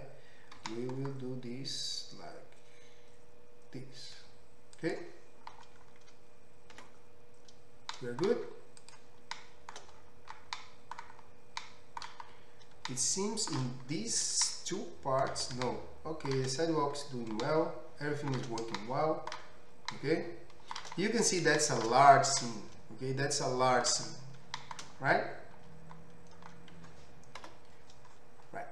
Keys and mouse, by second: 0.6 g, 4.2-7.9 middle drag, 4.9-8.4 right drag, 7.4 Tab, 8.0 middle click, 8.4-28.7 middle drag, 27.4 KP_5.